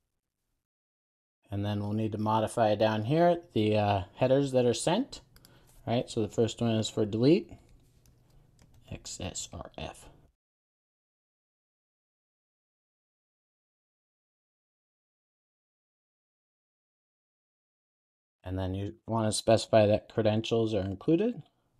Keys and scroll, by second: 0.6 super+s, 15.8 Return, 17.3 super+s, 21.4 Return.